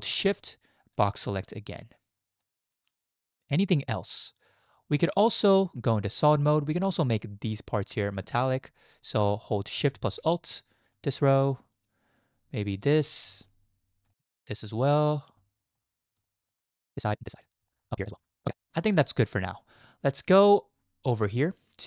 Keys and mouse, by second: 1.2-2.4 shift+drag, 4.6-5.0 shift+middle drag, 5.3 z, 12.7 alt+shift+click, 13.4 shift+click, 14.5 alt+shift+click, 15.4 shift+click, 16.2 shift+click, 17.7 shift+click, 18.4 shift+click.